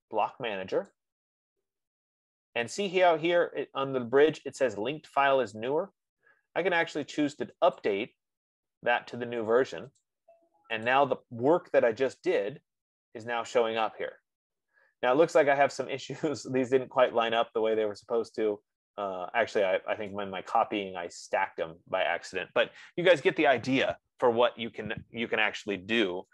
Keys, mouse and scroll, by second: 1.4 click, 8.3 click, 10.3 click, 11.2 click, 13.0-13.4 scroll, 20.3 right click, 21.0-21.3 scroll.